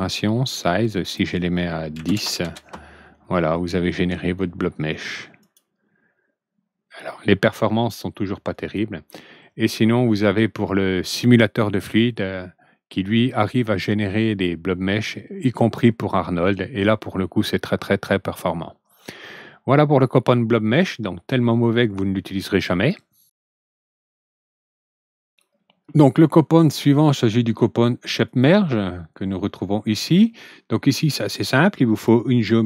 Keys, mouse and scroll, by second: 0.8 click, 1.9 ctrl+n, 5.3 click, 8.4 click, 22.9 click, 26.4 click, 27.0 click, 28.2 click, 31.1 click, 31.8 click.